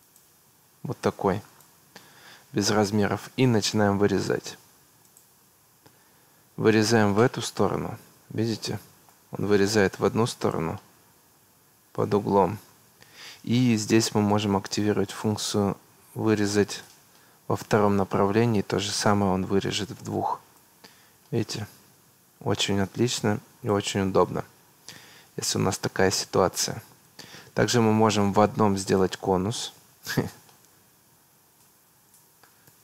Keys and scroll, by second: 2.2 Escape.